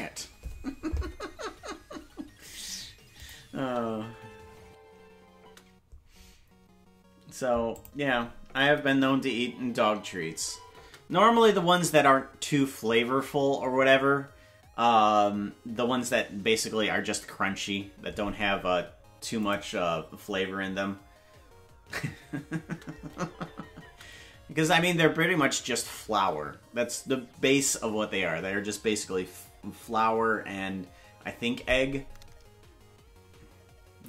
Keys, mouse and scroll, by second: 3.2 click, 3.6 space, 5.5 space, 7.8 click, 8.4 space, 19.4 click, 22.7 space, 27.5 space.